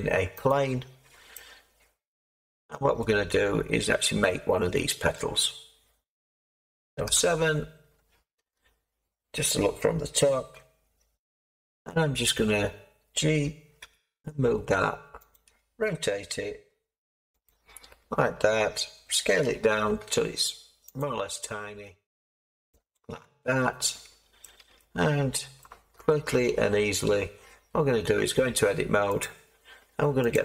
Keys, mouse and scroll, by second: 3.0-13.8 middle drag, 7.0 7, 13.8 g, 15.3 click, 19.4 s, 23.5 middle click, 23.9 middle click, 24.6 Caps_Lock, 24.7 middle click, 26.0-28.1 middle drag, 28.1 Tab, 29.2-30.4 drag.